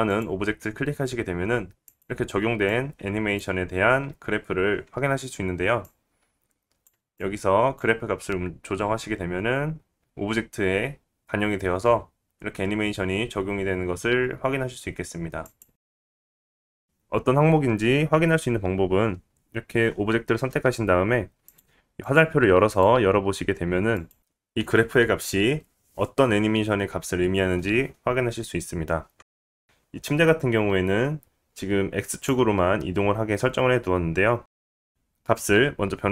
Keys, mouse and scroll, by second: 1.3 click, 1.3 middle click, 1.3 right click, 3.2 click, 7.1 click, 8.4 click, 9.9 g, 15.7 click, 16.4 middle click, 16.4 right click, 22.7 click, 23.3 click, 23.9 click, 25.2 click, 26.4 click, 27.0 click, 27.0 middle click, 27.0 right click, 29.6 click, 32.0-36.1 right drag, 33.5-36.1 drag, 33.5-36.1 middle drag.